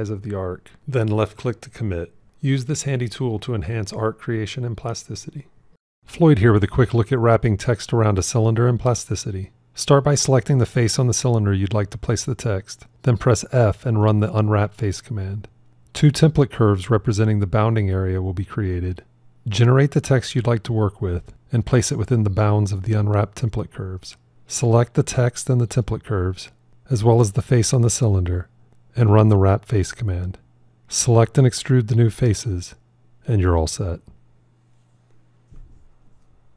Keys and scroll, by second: 13.2 f.